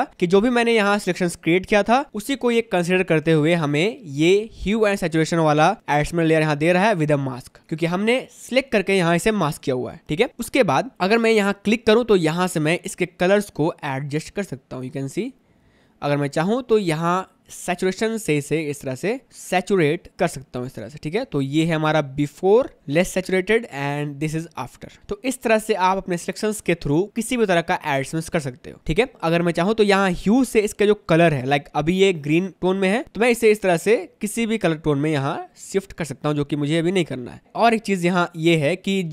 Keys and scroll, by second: 3.2 space, 10.6 space, 20.9 space, 24.5 space.